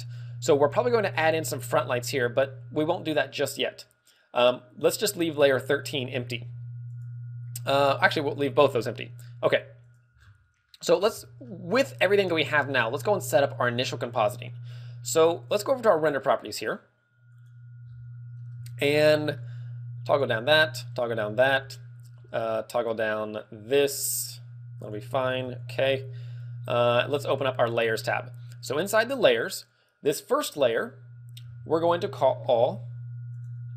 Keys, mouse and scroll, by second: 9.8 click, 10.1-10.6 scroll down 5, 10.6 middle click, 11.0 click, 11.0 middle click, 11.0 scroll down 1, 11.0 z, 11.1 middle click, 11.5-11.9 scroll up 4, 16.1 click, 17.3 click, 17.8-18.3 scroll up 6, 19.1 middle click, 20.1 click, 21.0 click, 24.8 click, 25.3 ctrl+w, 26.9 click, 27.7 click, 29.6 click.